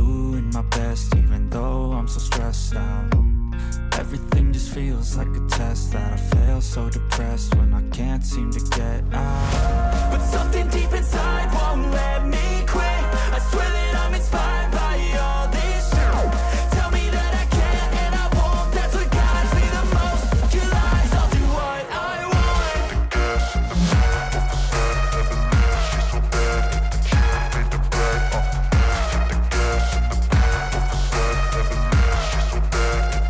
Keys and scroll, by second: 8.1 ctrl+d, 17.5 ctrl+d.